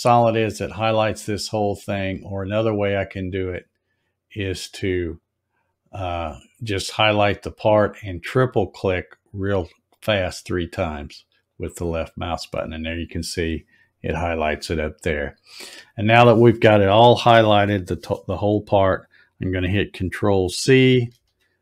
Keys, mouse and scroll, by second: 2.4 click, 5.1 click, 11.0 click, 11.2 click, 11.5 click, 21.1 ctrl+c.